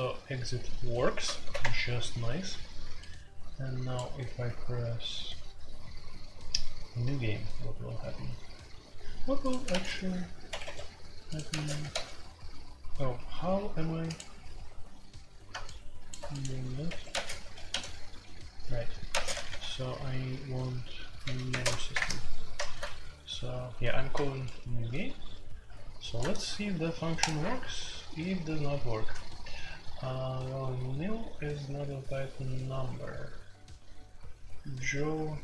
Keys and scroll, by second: 1.3 alt+p, 1.6 Return, 9.7 space, 9.8 b, 10.4 Escape, 10.6 Escape, 11.5 space, 11.6 b, 11.9 d, 16.8 Escape, 17.1-17.7 typing, 19.1-19.4 typing, 20.8-21.6 typing, 21.9 Return, 24.4 typing.